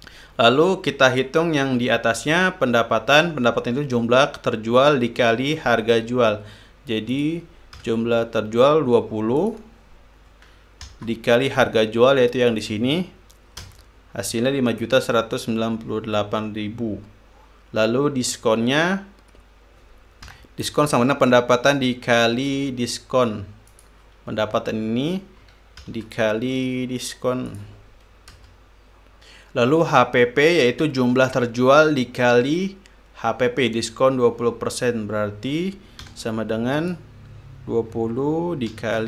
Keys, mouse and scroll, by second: 7.7 click, 8.4 =, 10.0 click, 11.5 shift+8, 13.1 click, 14.3 Return, 20.9 =, 24.3 click, 26.4 shift+8, 28.1 click, 29.0 Return, 36.6 =, 37.4 click.